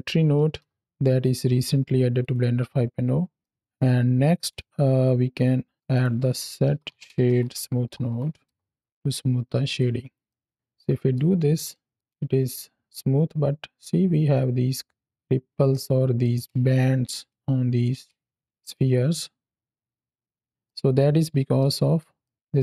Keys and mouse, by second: 2.1 click, 3.3 middle drag, 3.7 click, 5.7 shift+a, 9.5 click, 10.1-10.5 middle drag, 10.6-11.0 middle drag, 11.6 middle click, 12.0 space, 15.2 space, 15.6-16.1 middle drag, 16.5 space, 16.9 space, 18.1 space, 18.4 click, 18.4 space, 18.6 space, 20.5 space, 20.5 click, 21.5 ctrl+middle click, 22.1 middle click.